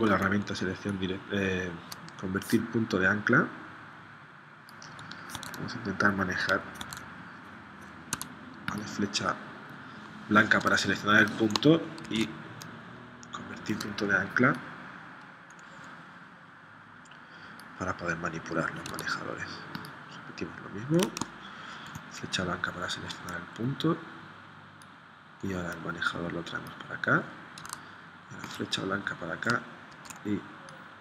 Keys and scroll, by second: 5.3 super+Tab, 6.8 super+Tab, 8.1 a, 12.0 shift+c, 18.9 a, 21.7 shift+c, 27.6 a, 29.9 shift+c.